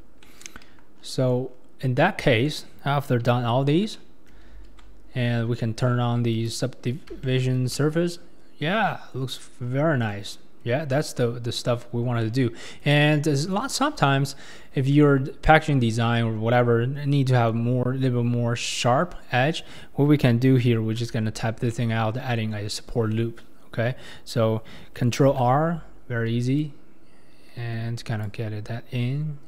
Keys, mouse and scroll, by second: 0.2 middle click, 1.0-3.3 scroll, 3.3 Tab, 3.6-4.0 scroll down 2, 4.0 middle click, 4.5 alt+z, 6.3 click, 6.8-7.2 scroll up 4, 7.2-7.6 shift+middle drag, 7.6 scroll down 1, 7.7-8.2 scroll up 1, 8.2-9.5 middle drag, 9.5 scroll up 1, 9.6-10.1 scroll down 6, 10.1-10.9 middle drag, 10.9-11.8 scroll up 1, 11.8-12.2 scroll down 2, 12.2 scroll up 1, 12.2-13.0 middle drag, 13.0-13.6 scroll up 5, 13.6-16.4 shift+middle drag, 16.4-17.9 scroll up 4, 17.9-20.7 scroll down 3, 20.7-21.0 scroll down 1, 21.0 Tab, 21.7-25.2 middle drag, 25.2 ctrl+r.